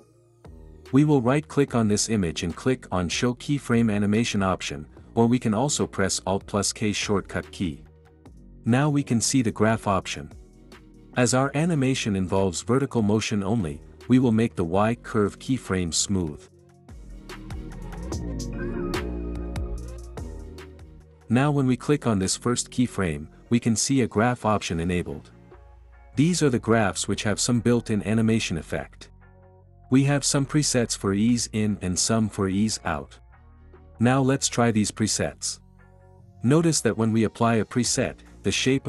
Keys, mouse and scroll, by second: 3.4 click, 17.7-18.7 drag, 21.6-22.6 drag, 26.3-27.3 drag, 36.7 click.